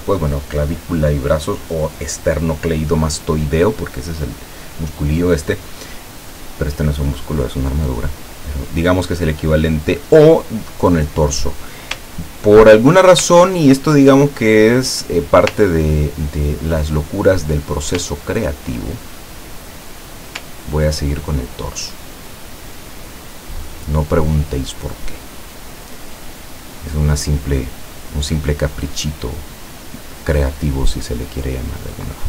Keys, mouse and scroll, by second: 12.6 ctrl+scroll down 2, 15.0 click, 15.9-17.5 ctrl+drag, 18.3-18.7 ctrl+scroll down 4, 19.1 ctrl+click, 20.8 ctrl+scroll down 2, 22.4 click, 31.4-32.2 drag.